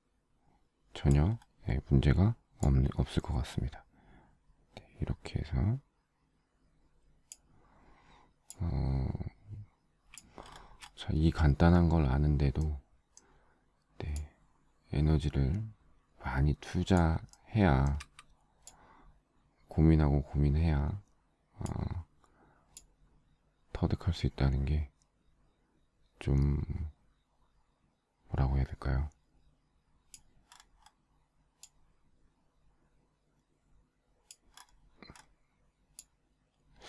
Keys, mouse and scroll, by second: 17.5 shift+middle click.